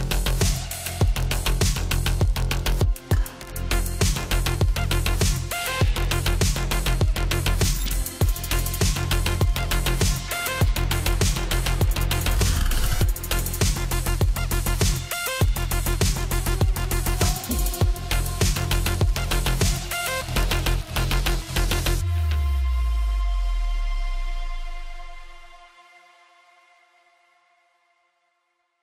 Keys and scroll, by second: 16.4-18.2 typing.